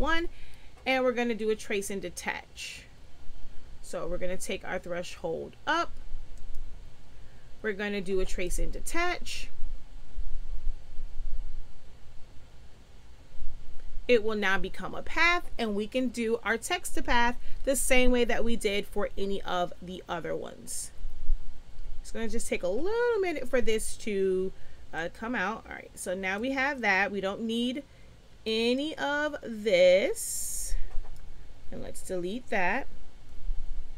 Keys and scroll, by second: 31.6 Delete, 33.3 Delete.